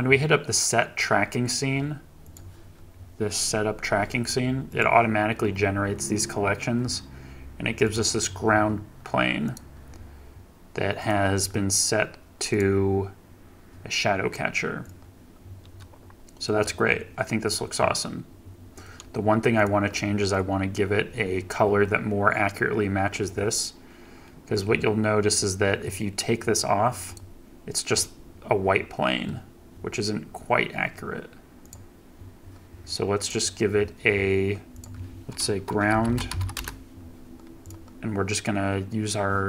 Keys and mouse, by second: 9.4 click, 11.0 click, 12.5 click, 15.5 middle click, 19.6 click, 31.6 click, 33.2 click, 34.8-36.8 drag.